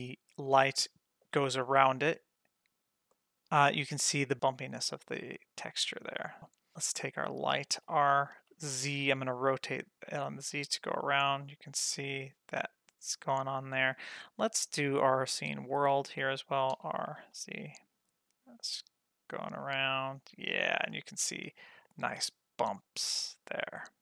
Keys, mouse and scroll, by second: 0.2 scroll up 2, 0.4-1.2 middle drag, 1.4 scroll up 1, 1.6 shift+middle click, 1.9 middle drag, 2.4-3.1 scroll up 2, 3.1-5.5 middle drag, 5.5-6.1 scroll down 3, 5.9-6.7 middle drag, 7.3 click, 7.7 r, 14.6-15.8 drag, 16.7 r.